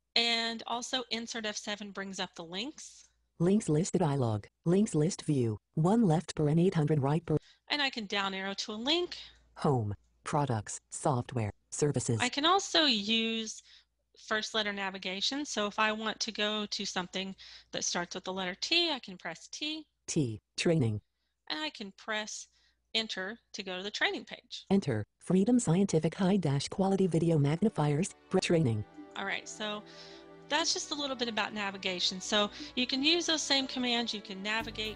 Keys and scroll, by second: 0.4 Insert, 0.4 F7, 18.9 t, 22.9 Return.